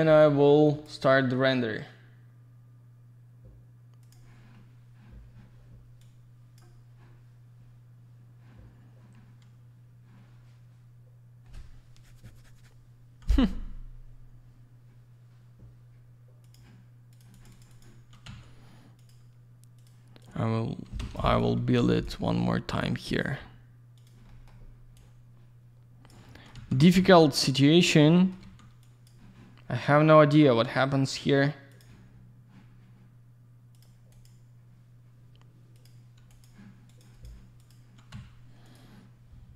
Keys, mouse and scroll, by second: 0.2 click, 4.0 click, 4.1 click, 6.0 click, 16.7 click, 17.1 click, 17.2 click, 17.3 click, 17.4 click, 17.5 click, 17.6 double click, 17.7 click, 17.8 click, 18.3 typing, 19.0 click, 19.1 click, 19.8 click, 19.8 click, 20.2 click, 21.0 Escape, 21.4 click, 21.9 click, 22.0 click, 23.1 click, 23.2 click, 24.0 click, 24.1 click, 24.3 middle click, 24.5 double middle click, 24.6-24.9 scroll down 1, 25.0 click, 27.3 click, 28.0 alt+middle click, 28.8 click, 32.0 click, 33.7 click, 34.1 click, 35.7 click, 36.3 click, 36.9 click, 37.0 click, 37.1 click, 37.2 click, 37.6 click, 37.7 double click, 38.2 z, 38.6 click, 38.7 click.